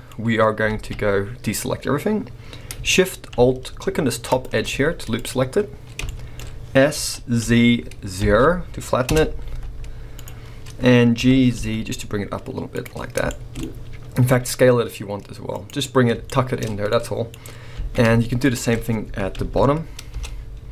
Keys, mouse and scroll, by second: 0.1-0.7 scroll up 3, 0.7 alt+a, 4.3 alt+shift+click, 4.6 z, 6.0 shift+middle click, 6.9 s, 9.1 Return, 9.5 z, 11.1 g, 12.8 click, 13.1 scroll down 2, 13.3 shift+middle click, 13.6-14.2 scroll up 2, 14.2 s, 15.7 click, 15.9-16.2 scroll down 2, 16.2 shift+middle click, 16.8 scroll down 1, 17.3 scroll up 1, 17.8 alt+a, 18.4 alt+shift+click, 19.0 s, 20.2 Return.